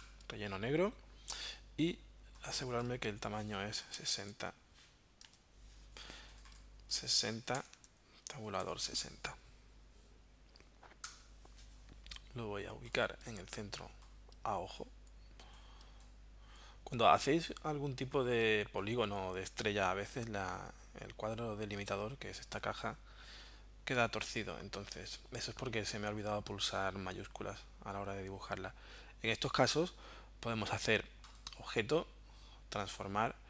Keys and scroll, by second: 3.9 0, 4.1 Tab, 5.3 Tab, 7.1-9.1 typing, 11.0 Return.